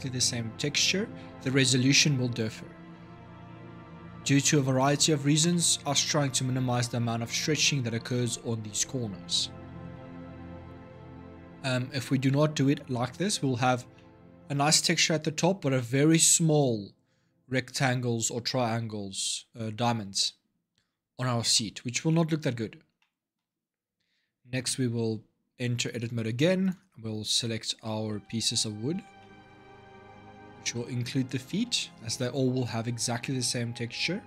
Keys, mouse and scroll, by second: 5.3-8.3 middle drag, 9.7-12.8 middle drag, 13.7-18.5 middle drag, 21.3-24.4 middle drag, 24.4 Tab, 25.6 click, 26.4 click, 27.1 l, 27.9 l, 28.7 l, 29.0 middle click, 29.7 l, 30.4 l, 31.3 l, 31.9 l, 34.1 Tab.